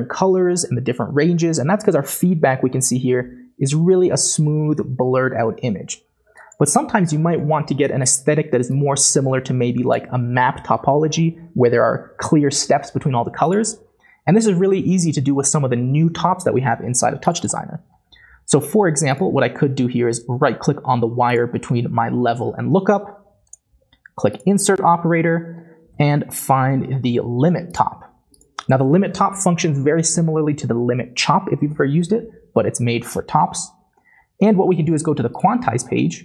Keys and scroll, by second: 26.0 typing.